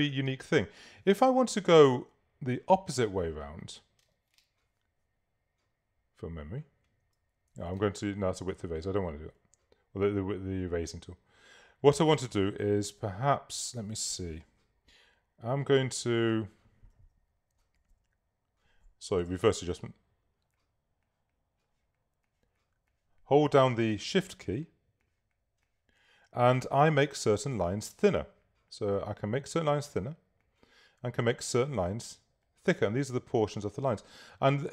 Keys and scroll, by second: 0.3 space, 7.7 super+z, 15.0 Return.